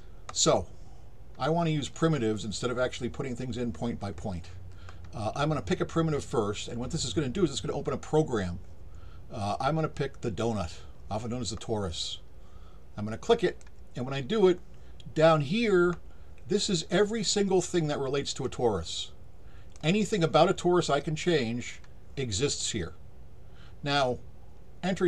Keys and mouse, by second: 13.4 click, 18.4-19.7 drag.